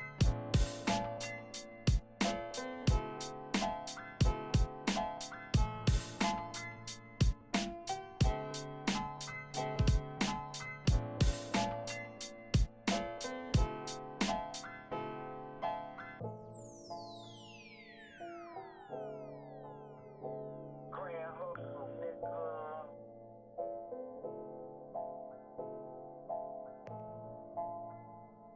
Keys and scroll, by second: 4.7 shift+Left, 5.1 shift+Left, 5.2-6.1 typing, 6.3 shift+Left, 6.5 shift+Left, 6.9 shift+Left, 7.3 Right, 7.4 Right, 12.5 super+c, 12.6 super+v, 14.5 shift+Tab, 14.8 shift+Right, 14.9-15.8 typing, 15.9 shift+Right, 17.3 typing, 22.1 super+c, 24.2 super+v, 25.2 shift+Right, 25.7 shift+Left, 26.7 shift+Right, 27.9 shift+Right, 28.1 shift+Right.